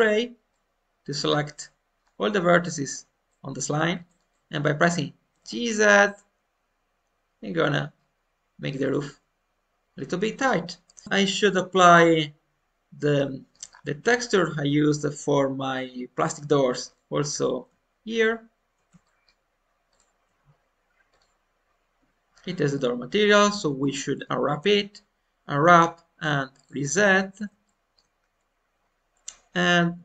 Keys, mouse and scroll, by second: 1.2-1.5 scroll down 1, 1.5 middle click, 2.0-3.2 scroll up 1, 3.2-5.1 middle drag, 5.2 g, 11.0 middle click, 11.7-13.1 drag, 13.1 middle click, 13.6-14.1 scroll up 1, 14.1-16.8 middle drag, 16.8-18.8 drag, 19.0 shift+middle click, 19.8-22.0 shift+drag, 22.7-23.7 middle drag, 23.7 shift+scroll up 1, 23.9 middle click, 24.5 u, 27.6-30.0 shift+middle drag.